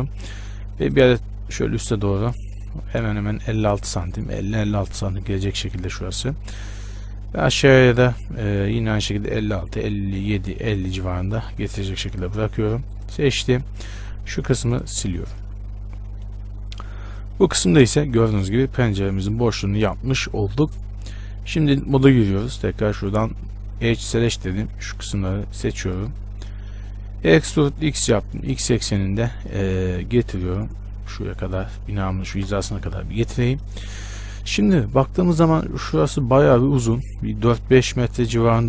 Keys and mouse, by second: 0.6 ctrl+r, 0.6-3.8 middle drag, 5.9-9.8 right drag, 6.6 ctrl+r, 13.1-14.2 drag, 13.7-16.0 right drag, 14.2 x, 15.4 Tab, 21.6 Tab, 23.3-24.7 drag, 24.7-26.0 middle drag, 26.0-27.4 right drag, 27.5 e, 31.0-38.6 drag.